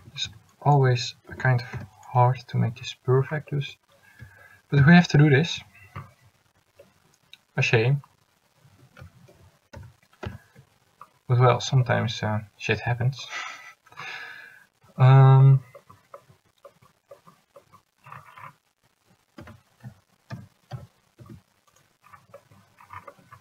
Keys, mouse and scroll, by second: 0.1 a, 0.6 c, 1.5 s, 4.9 ctrl+z, 9.4 ctrl+z, 9.9 ctrl+z, 10.4 ctrl+z, 19.5 s.